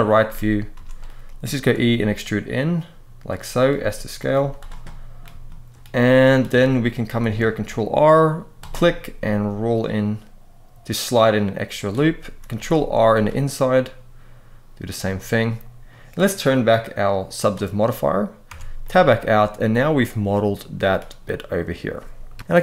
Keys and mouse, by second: 0.5 z, 1.5 e, 3.3 click, 3.5 s, 4.1 z, 4.6 middle click, 5.2 shift+middle click, 5.8 middle click, 6.3 shift+middle click, 6.4 shift+click, 7.2 ctrl+r, 11.5 click, 12.3 ctrl+r, 14.6 click, 15.2 middle click, 17.1 click, 18.3 Tab, 18.5-20.2 middle drag, 22.1 KP_3.